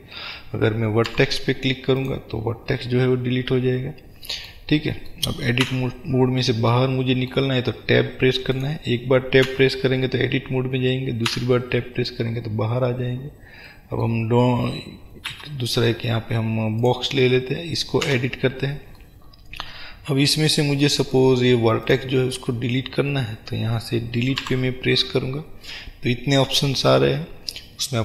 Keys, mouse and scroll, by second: 1.2 Delete, 5.7 Tab, 8.7 click, 9.5 Tab, 12.4-13.5 scroll down 1, 13.8-21.9 middle drag, 15.5 shift+a, 17.5-18.2 scroll up 2, 18.2 Tab, 18.6-19.1 scroll up 2, 21.9 click, 24.5 Delete.